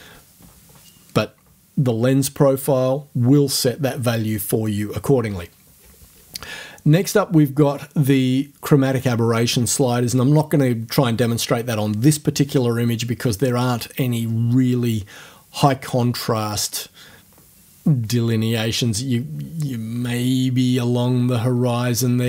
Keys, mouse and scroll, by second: 20.1 scroll down 2, 22.0-22.2 ctrl+scroll up 4.